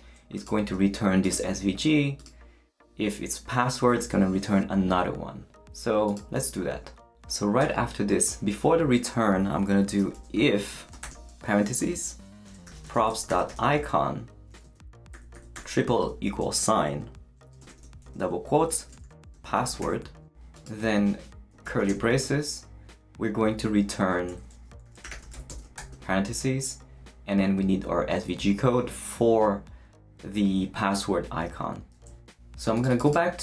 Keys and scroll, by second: 7.6 Return, 9.7-11.0 typing, 12.2-14.1 typing, 15.1 =, 16.0 space, 17.7-20.3 typing, 21.5 shift+space, 21.6 shift+[, 21.9 shift+Return, 22.8 Return, 24.6-26.3 typing.